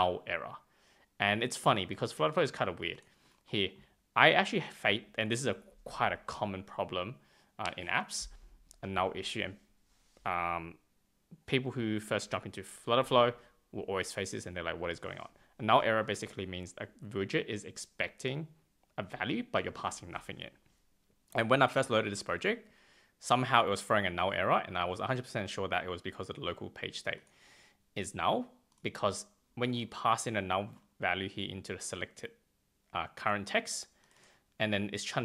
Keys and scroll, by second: 4.7 super+Tab.